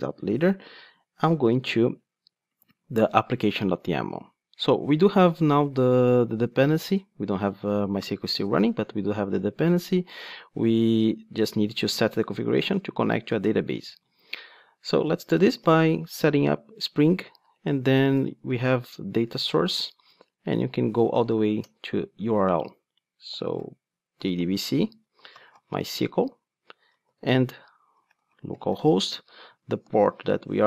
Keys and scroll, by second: 21.7 Return.